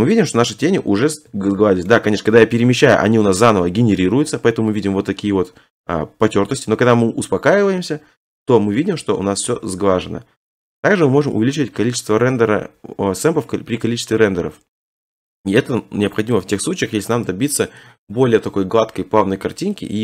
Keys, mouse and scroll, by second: 0.9 middle click, 1.0 middle click, 1.9 shift+middle click, 2.2 shift+middle click, 2.3 middle click, 2.3 middle click, 2.8 middle click, 2.8 middle click, 2.9 middle click, 3.2 middle click, 3.3 middle click, 3.7 middle click, 3.9 middle click, 4.3 middle click, 4.4 middle click, 4.5 middle click, 4.6 middle click, 4.8 middle click, 5.1 middle click, 15.2-15.6 middle click, 15.5 middle click, 15.5 middle click, 16.4 shift+middle click.